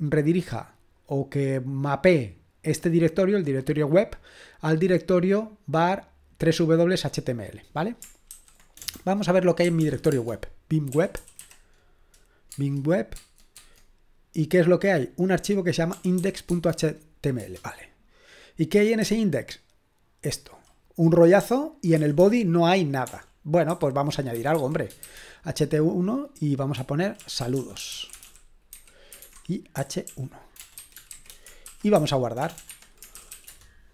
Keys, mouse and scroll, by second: 7.2-8.3 drag, 8.3 typing, 9.4-11.9 typing, 12.5 Tab, 13.1 Tab, 13.5 Tab, 15.9 typing, 16.5 Tab, 17.4 Return, 19.6-25.5 typing, 27.2-33.6 typing, 32.7 Escape.